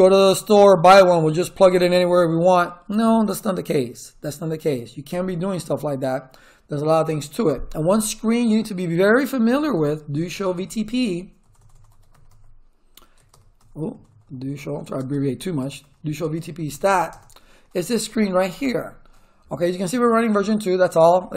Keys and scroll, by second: 9.1-13.5 typing, 14.7-17.3 typing.